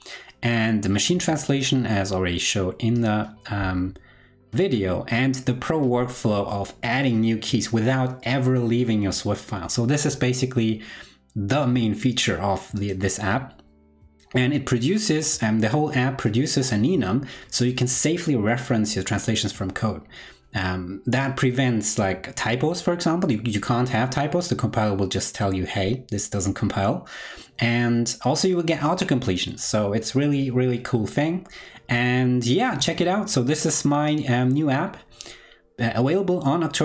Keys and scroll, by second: 34.4 super+l.